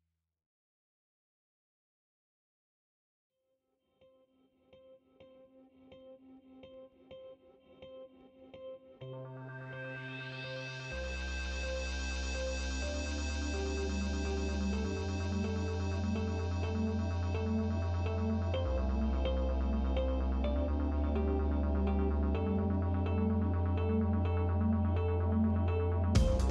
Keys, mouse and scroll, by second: 2.1 s, 4.8 KP_1, 6.0-7.5 drag, 8.4 drag, 8.7 click, 10.4 click, 11.1 super+c, 11.3 super+v, 12.0-13.2 drag, 13.8 KP_7, 14.9 click, 17.2 click, 18.6 click, 21.7 click, 23.0 click.